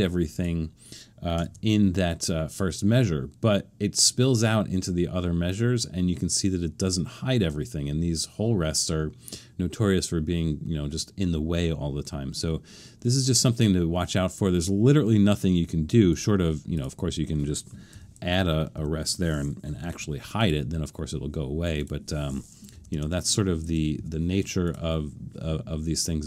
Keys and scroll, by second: 2.9 super+d, 17.9 7, 18.4 Left, 18.7 Left, 19.8 o, 22.7 BackSpace, 22.9 BackSpace, 24.0 Left, 24.3 BackSpace.